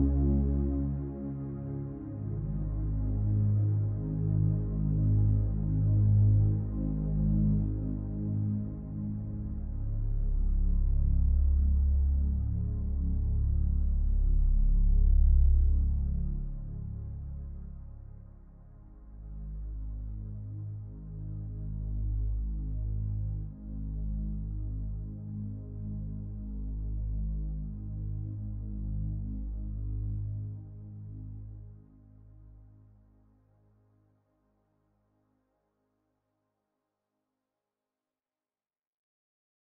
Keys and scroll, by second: 4.2 ctrl+j.